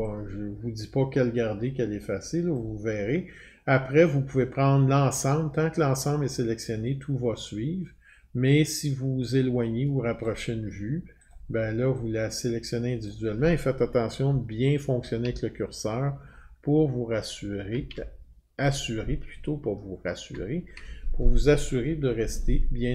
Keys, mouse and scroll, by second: 2.5 click, 10.2 click, 11.3 click, 13.0 click, 14.8 Up, 15.2 Up, 15.7-16.2 Down, 16.3-16.7 scroll down 23, 16.7-17.7 Down, 16.7 click, 18.0 scroll down 10, 20.7-22.9 scroll up 3.